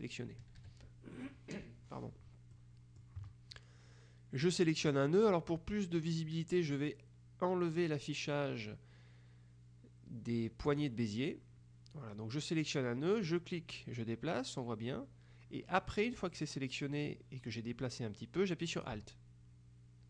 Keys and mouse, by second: 0.5 KP_Subtract, 2.7 click, 10.8 click, 13.3-20.0 drag.